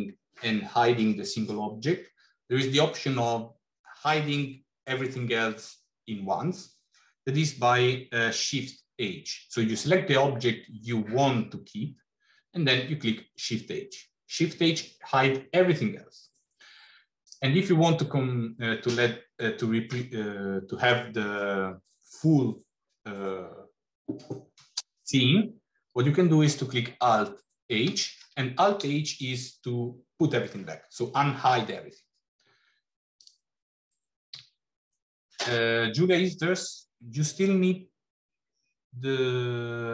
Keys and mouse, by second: 12.7 shift+h, 17.1 click, 27.9 alt+h, 34.2 x.